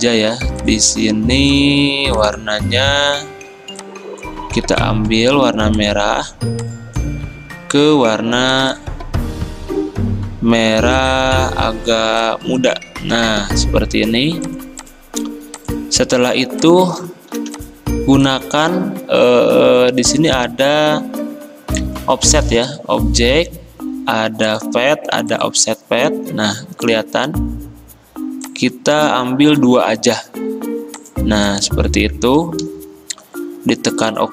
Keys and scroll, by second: 17.4 v, 30.2 2.